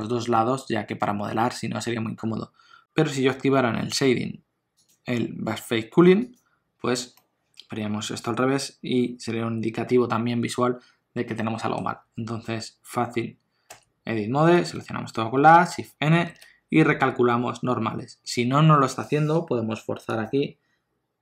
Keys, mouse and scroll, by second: 2.8 click, 4.7 click, 7.1 middle click, 13.6 Tab, 14.5 a, 16.1 shift+n, 20.0 click.